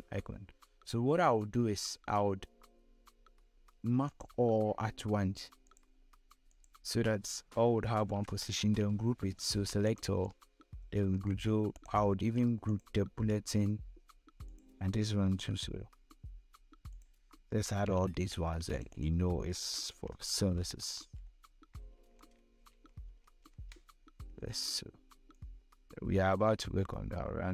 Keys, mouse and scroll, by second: 3.5 click, 4.5 click, 9.3 ctrl+shift+click, 9.9 ctrl+g, 11.2 click, 12.1 ctrl+shift+click, 13.0-13.6 shift+scroll down 3, 14.0-16.1 ctrl+drag, 16.5-17.5 ctrl+drag, 17.5 ctrl+g, 18.2 click, 19.4-20.6 typing, 21.8-23.3 typing, 24.8-26.4 drag, 26.4-27.5 scroll up 1.